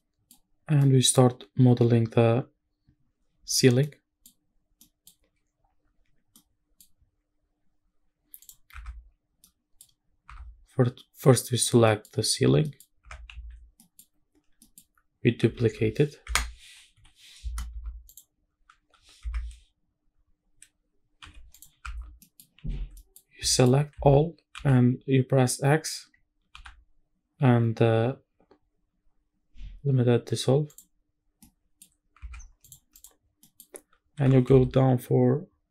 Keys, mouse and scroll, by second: 0.3-0.8 scroll up 3, 0.8 middle drag, 3.8-4.2 middle drag, 4.8 middle click, 5.6-6.0 scroll down 1, 6.0-6.3 scroll up 2, 6.3 middle click, 7.8-8.4 scroll down 1, 8.4 click, 8.7 Tab, 9.3 scroll down 1, 9.4 middle click, 10.0 scroll up 3, 10.3 Tab, 11.7 scroll down 2, 11.9 middle click, 12.5 scroll down 1, 12.6 middle click, 13.0 Tab, 13.3 a, 13.6 scroll down 1, 13.8 middle click, 14.2 scroll up 3, 14.4 scroll down 1, 14.6 middle click, 15.6 shift+d, 16.3 Escape, 16.9 p, 17.7 Tab, 18.1 click, 18.7 g, 19.2 Escape, 21.2 h, 21.5 click, 21.8 Tab, 22.2 middle click, 22.5-23.0 scroll up 2, 23.0 middle click, 23.3 scroll down 1, 23.5 shift+middle click, 23.9 a, 24.6 x, 26.5 x, 31.3 scroll down 2, 31.4 middle click, 31.9 scroll up 3, 32.3 Tab, 32.3 scroll down 2, 32.6 click, 33.2-34.1 scroll up 3, 33.4 middle click, 34.1 g, 34.5 z.